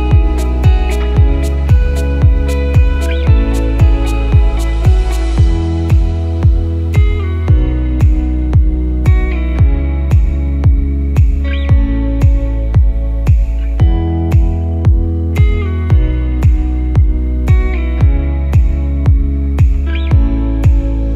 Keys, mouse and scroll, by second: 2.7 click, 5.6 click, 8.6 click, 14.7 click, 15.9 click, 18.9 click.